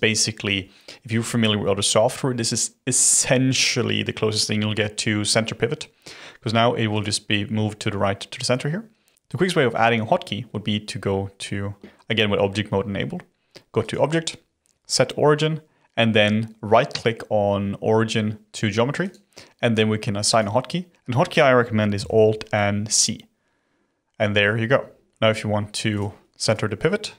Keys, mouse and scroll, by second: 13.8-16.8 drag, 25.9 click, 26.4 click, 27.1 scroll down 1.